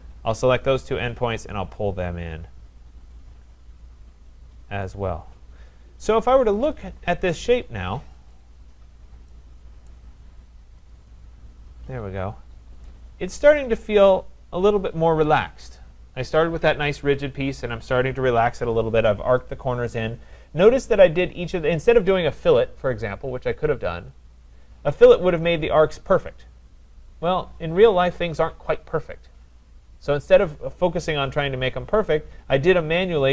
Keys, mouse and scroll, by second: 4.8 click, 6.6 click, 6.8 click, 8.2 click, 8.4 click, 8.8 scroll, 9.9 right click, 10.9 click, 11.1 click, 11.6-12.9 scroll, 12.9 scroll down 8, 13.6 right click, 13.9-17.4 scroll.